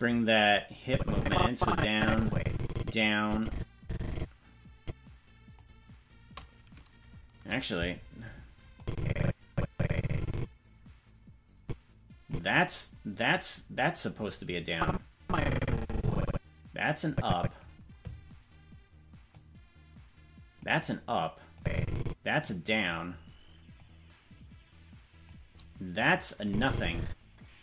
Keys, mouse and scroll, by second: 0.8-5.6 drag, 8.8-12.3 drag, 14.7-17.6 drag, 19.3-20.6 drag, 21.5-22.9 drag, 23.7-25.3 drag, 26.0 right click, 26.4-27.6 drag.